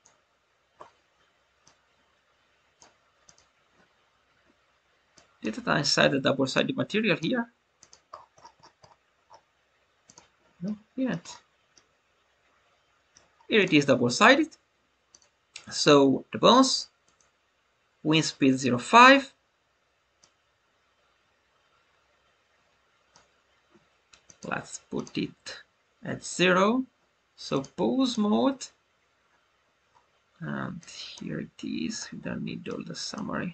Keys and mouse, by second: 1.5-2.7 drag, 5.1 click, 6.6 click, 7.8 click, 10.0 click, 13.5-15.1 drag, 17.1-18.5 drag, 20.1-23.0 drag, 24.2 click, 27.5-28.0 drag, 30.8-33.5 drag.